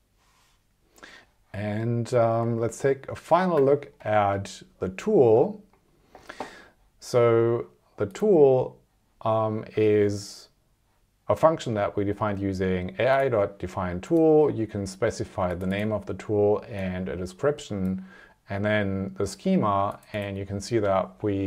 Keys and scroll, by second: 2.4 super+Tab.